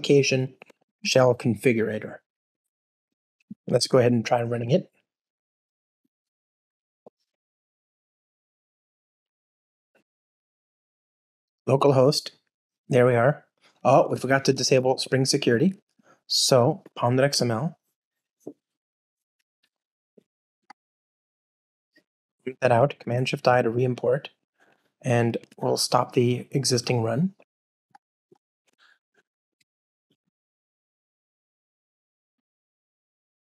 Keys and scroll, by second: 1.0 Return, 3.7 alt+super+l, 15.8 shift+super+o, 21.5 alt+shift+super+/, 23.3 shift+super+i, 27.9 super+F2, 28.9 ctrl+alt+shift+r.